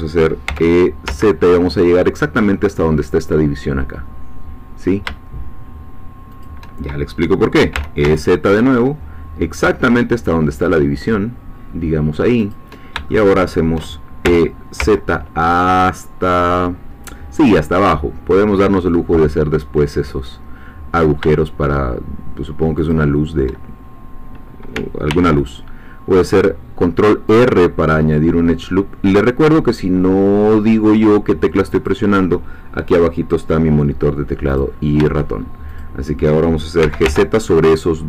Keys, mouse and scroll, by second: 0.5 e, 1.1 z, 6.3 shift+click, 7.7 e, 8.0 z, 12.4 shift+click, 13.1 shift+middle click, 14.3 e, 14.8 z, 22.8 shift+click, 25.1 ctrl+r, 27.3 click, 31.8 click, 34.5 click, 35.8 shift+click, 36.8 g, 37.1 y.